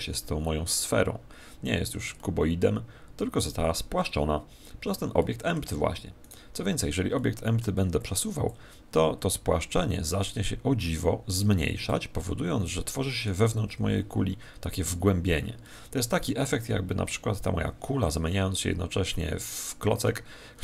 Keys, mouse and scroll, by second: 5.1-6.8 middle drag, 6.2 right click, 7.1-8.4 middle drag, 8.4 click, 12.1-17.3 middle drag.